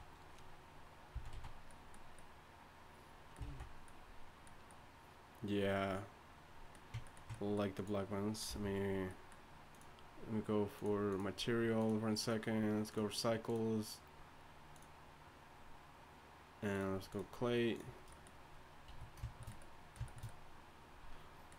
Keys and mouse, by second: 1.2 z, 1.3 z, 3.5 alt+z, 7.8-8.7 drag, 8.5 t, 18.9 a.